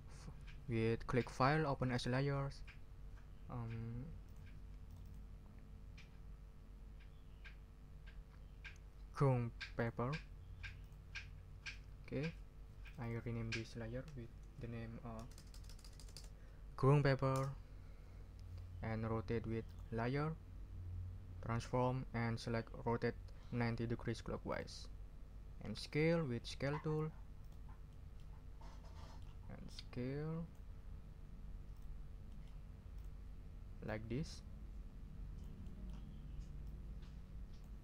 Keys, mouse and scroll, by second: 1.2 click, 1.9 click, 4.2 click, 4.8 click, 6.7 scroll down 1, 9.8 click, 10.8 click, 12.8 click, 14.0 Right, 15.2 BackSpace, 17.3 Return, 19.6 click, 24.5 click, 25.9 click, 27.4 click, 27.9 middle click, 29.0 middle click, 29.7-30.7 drag, 31.7 click, 32.3 middle click, 32.9 click, 33.8-35.6 drag, 35.6 middle click, 35.8 click, 36.6-37.8 drag.